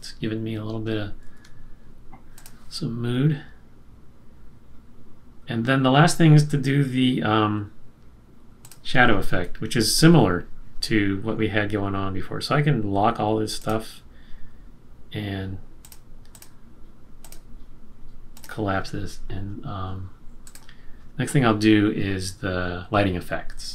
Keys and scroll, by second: 1.2 super+-.